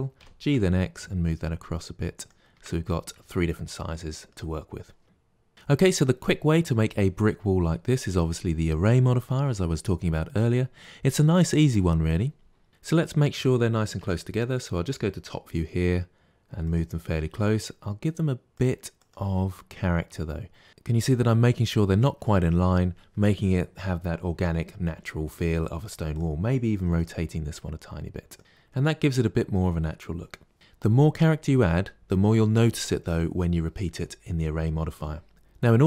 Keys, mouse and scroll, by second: 0.0 g, 2.4 Tab, 2.7-5.0 middle drag, 5.0 z, 12.9 click, 13.9 KP_7, 15.4 g, 17.0 g, 18.8 click, 19.1 g, 26.0 click, 26.7 r, 28.4-30.5 middle drag.